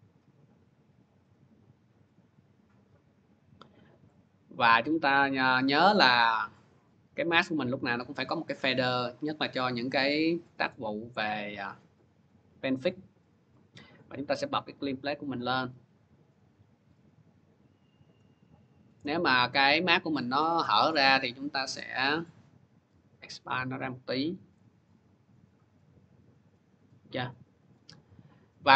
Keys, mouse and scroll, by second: 3.9 click, 6.4 click, 7.8 click, 10.5 click, 11.0 click, 13.6 click, 15.0 click, 17.1 click, 17.9 click, 20.4 click, 20.8 middle click, 21.8 middle click, 24.4 click, 25.6 scroll, 27.1 click, 27.5 click.